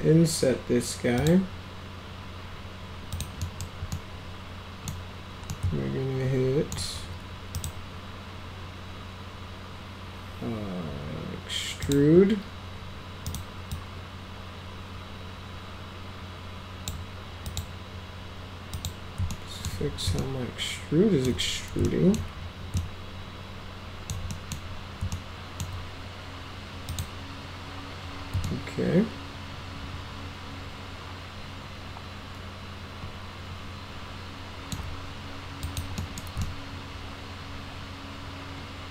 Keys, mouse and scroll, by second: 1.2 click, 3.2 click, 3.5 middle click, 4.0 middle click, 5.5-6.8 alt+middle drag, 7.6 right click, 11.8 click, 13.3 right click, 13.8-16.9 drag, 17.5 click, 18.8 click, 19.3-19.7 alt+middle drag, 20.2-21.3 alt+middle drag, 21.9 alt+middle click, 22.8-24.1 alt+middle drag, 24.4 middle click, 25.2 alt+middle click, 26.9 click, 28.5-34.8 alt+middle drag, 35.7 click, 36.0 middle click, 36.5-38.9 alt+middle drag.